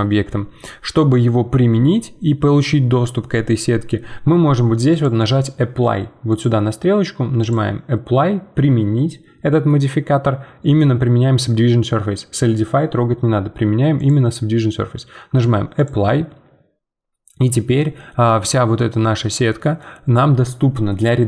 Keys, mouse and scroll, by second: 4.9-19.5 drag, 19.5-21.2 middle drag.